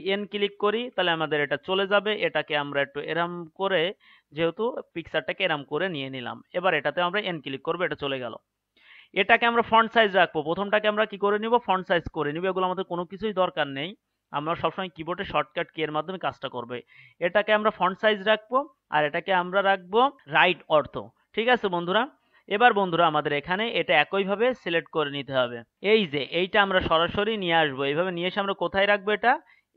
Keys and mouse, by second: 0.7 n, 2.8-11.5 drag, 11.6 click, 12.0 click, 12.2 click, 20.2 KP_3, 25.7-26.9 drag.